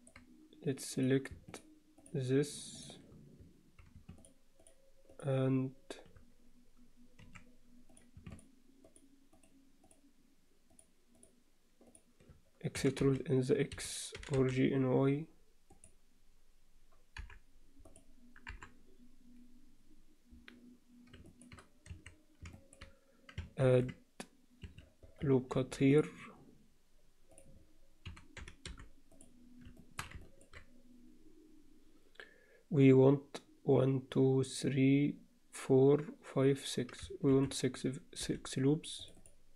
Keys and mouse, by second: 2.7 shift+click, 5.1 shift+click, 7.2 2, 7.9 click, 8.3 shift+click, 8.9 shift+click, 9.9 shift+click, 10.7 shift+click, 11.1 shift+click, 12.7 e, 14.1 g, 17.9 click, 18.5 KP_7, 21.3 alt+shift+middle click, 21.9 1, 22.5 shift+middle click, 23.6 ctrl+r, 25.5 ctrl+r, 28.1 s, 29.8 shift+middle click, 30.2 ctrl+middle click, 37.3 ctrl+r.